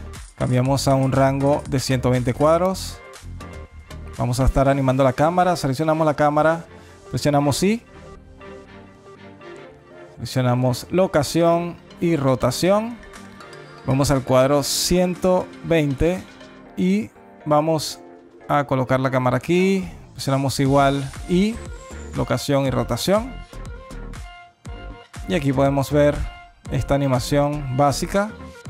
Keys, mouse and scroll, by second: 0.1 click, 4.7 click, 9.3 i, 11.3 i, 13.8 click, 15.3 alt+click, 15.5 alt+space, 16.3 alt+middle click, 18.2 i, 19.7 i, 21.0 space.